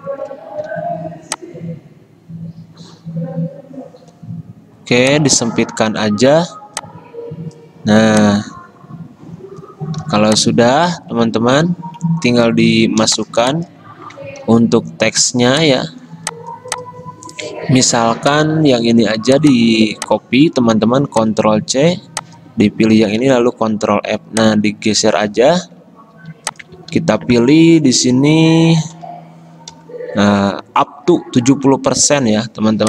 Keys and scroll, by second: 0.7 g, 10.1 v, 13.1 v, 14.5 ctrl+g, 20.8 ctrl+c, 21.7 Escape, 23.3 ctrl+f, 26.2 typing, 26.9 ctrl+a, 28.8-29.8 typing.